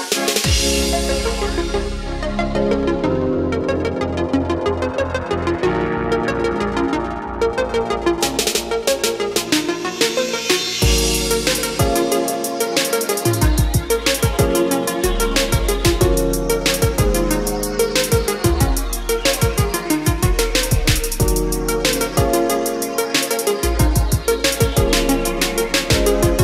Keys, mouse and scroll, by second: 8.2-8.8 scroll up 1, 9.4-9.9 scroll down 1, 9.9-11.1 scroll up 1, 11.1-14.4 drag, 14.4-15.6 scroll down 1, 15.6 click, 20.1-20.4 scroll down 1, 21.2 click, 21.9 scroll up 1, 22.8-23.3 scroll down 1, 24.2-24.9 scroll up 1, 26.1-26.4 drag.